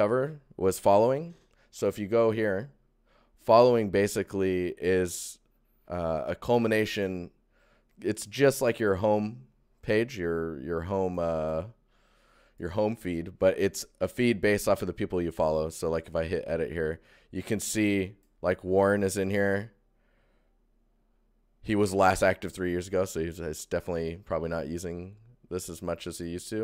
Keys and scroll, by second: 1.9 ctrl+1.